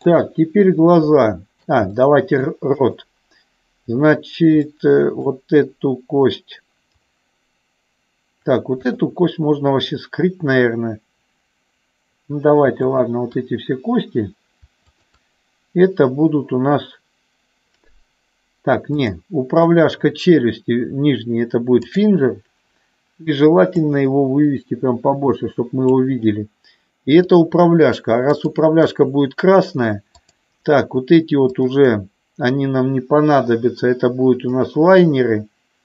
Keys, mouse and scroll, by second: 1.4 shift+middle click, 2.1 middle click, 2.7-4.1 drag, 4.6 middle click, 8.7-10.0 drag, 12.8-14.1 shift+drag, 19.0-20.2 drag, 23.8-26.0 drag, 30.1-31.5 drag, 31.6-33.0 shift+drag, 34.8-35.8 drag.